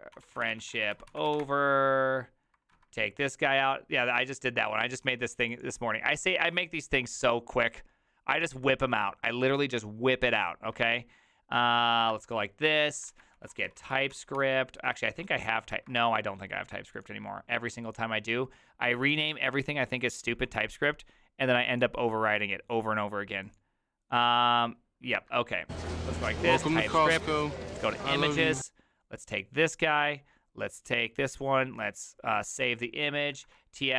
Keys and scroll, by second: 0.0-1.9 typing, 2.7 alt+=, 12.1 alt++, 13.1 ctrl+t, 13.1-16.5 typing, 20.3-21.1 typing, 33.2-33.9 typing.